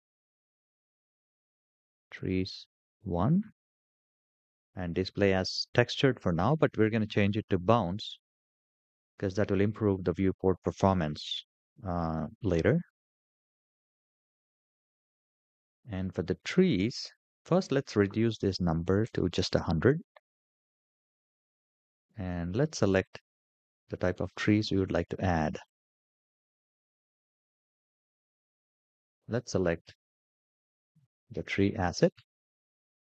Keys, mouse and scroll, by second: 15.8-17.5 scroll down 5, 17.5-19.1 drag, 18.6 KP_0, 19.9-21.2 scroll down 9, 22.7-33.1 drag.